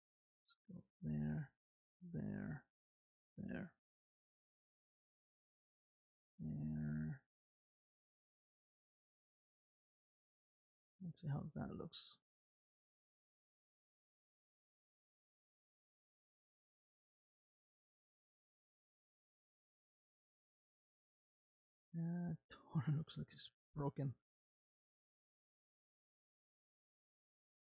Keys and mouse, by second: 1.3 r, 4.2 click, 5.8 r, 11.3 space, 21.2 space, 21.4-26.7 middle drag, 26.7 space.